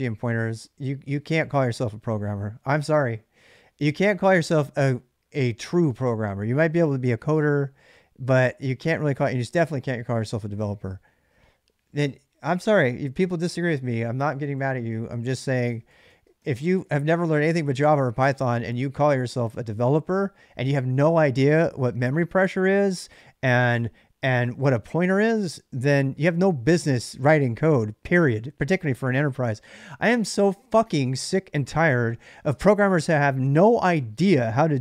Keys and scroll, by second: 15.0-17.1 typing.